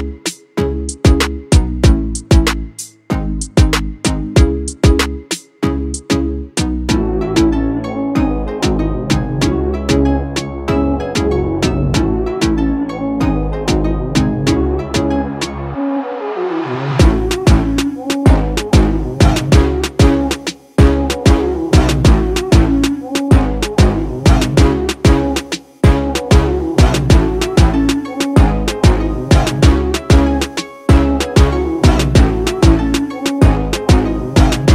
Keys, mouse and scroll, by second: 0.3-2.4 drag, 15.2-25.3 drag, 26.4-27.2 typing, 27.9 Return, 32.1 shift+click, 33.9 ctrl+g.